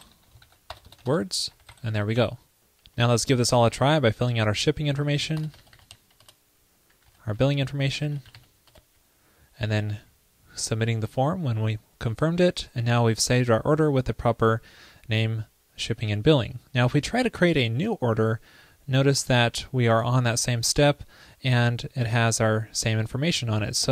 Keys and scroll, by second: 0.4 super+Right, 1.1 alt+BackSpace, 2.1 super+s.